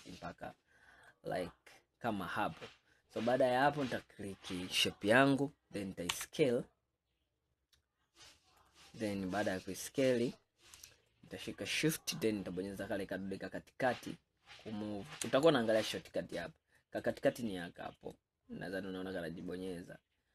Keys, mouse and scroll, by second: 1.7-2.3 scroll up 5, 2.3 scroll down 4, 3.6 click, 4.9-5.3 scroll down 2, 6.2 s, 9.2 scroll up 5, 11.2-14.2 shift+middle drag, 16.9-20.3 middle drag.